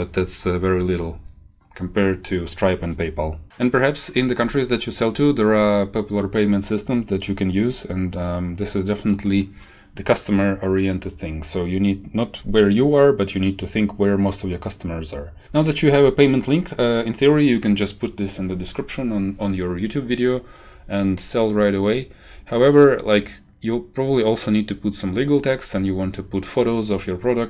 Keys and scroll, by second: 15.4 shift+Up, 15.6 shift+Home.